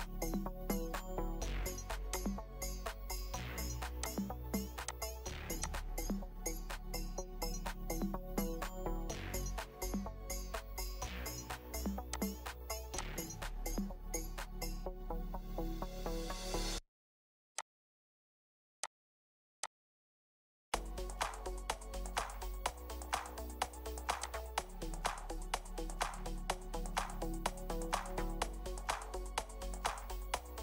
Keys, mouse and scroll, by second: 0.6 Return, 2.6 scroll up 1, 2.9 scroll down 1, 3.0-4.0 scroll up 1, 6.7 typing, 8.3 Return, 9.6-10.0 scroll up 1, 14.9 typing, 15.6 Return, 21.5 Return, 21.8 typing, 22.3 Return, 25.1 Return, 26.0-26.4 scroll up 1.